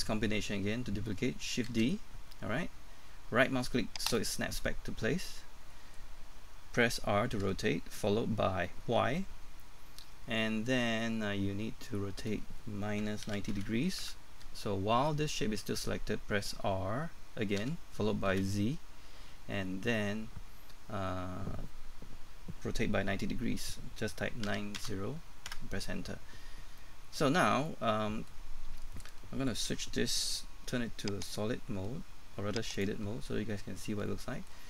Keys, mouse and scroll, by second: 1.7 shift+d, 4.1-5.1 right drag, 7.4 r, 13.2 KP_9, 15.1 middle click, 17.6-18.3 typing, 24.4 KP_9, 26.8 middle click, 31.3 click, 33.3 middle click.